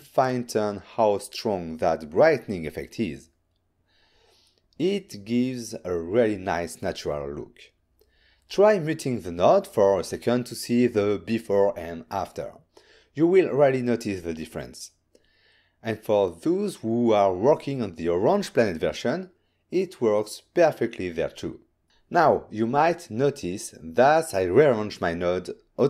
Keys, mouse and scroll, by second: 0.8 m, 2.0 m, 2.6 middle click, 3.2 click, 6.6 ctrl+shift+click, 8.3 click, 8.4 click, 8.9 m, 9.5 m, 12.3 middle click, 13.5 ctrl+shift+click, 15.1 shift+middle click, 16.1 ctrl+middle click, 17.0 shift+middle click, 18.2 click, 18.7 ctrl+scroll up 2, 19.2 m, 21.1 m, 22.0 ctrl+middle click, 22.5 middle click, 24.1 click, 25.4 n.